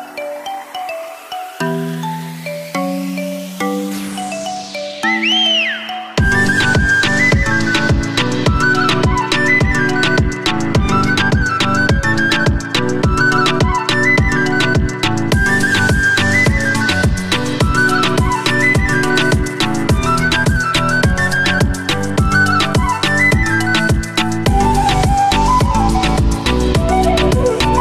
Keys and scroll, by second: 14.3 ctrl+z.